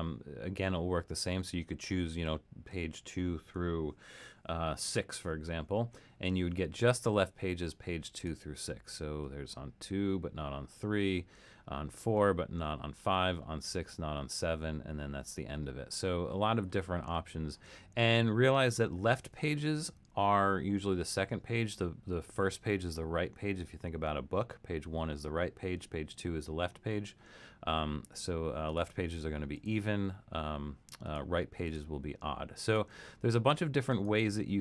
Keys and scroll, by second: 4.8 6.